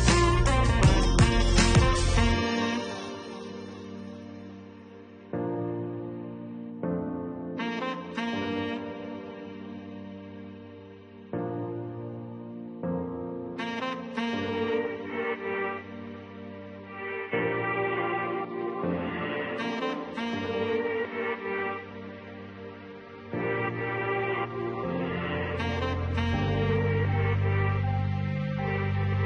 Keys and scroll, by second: 0.1 0, 3.6 1, 3.9 6, 4.7 0, 23.1 7, 23.5 4, 24.2 8.